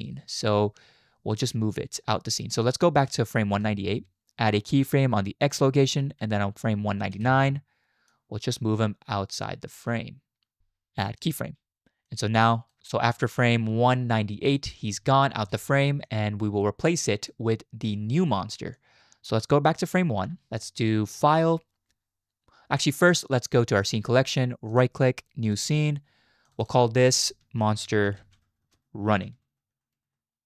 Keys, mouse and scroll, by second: 3.6 Left, 5.4 click, 7.2 Right, 8.2-10.6 drag, 11.2 click, 12.1 click, 12.8 space, 14.9 space, 15.4 space, 16.1 click, 18.7-20.0 drag, 20.5 Right, 21.2-22.7 drag, 24.7-25.5 drag, 26.4 click, 26.7-30.4 drag, 29.5 n.